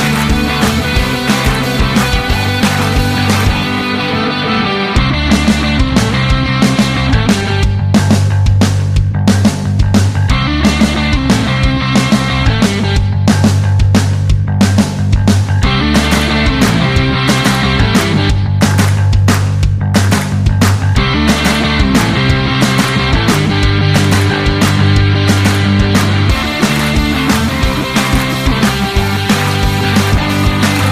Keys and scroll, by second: 14.6-16.9 typing.